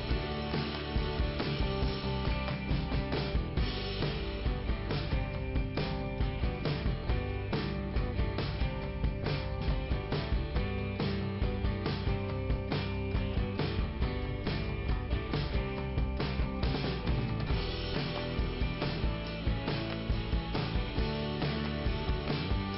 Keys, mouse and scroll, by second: 1.3-2.4 scroll up 1, 3.0 click, 4.7 click, 9.2 scroll down 1, 10.0 scroll up 1, 11.0 click, 12.6 click, 15.0 click, 15.1 click, 15.8 click, 16.9 click, 18.2 click, 18.8 click, 20.1 click.